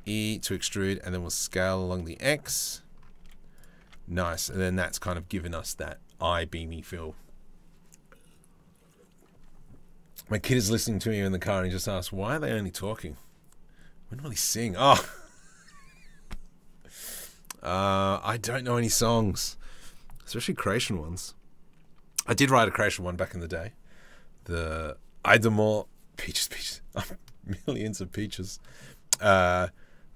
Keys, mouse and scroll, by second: 0.2 s, 2.8 z, 3.4 Tab, 4.1 middle click, 17.3 middle click, 28.5 middle click.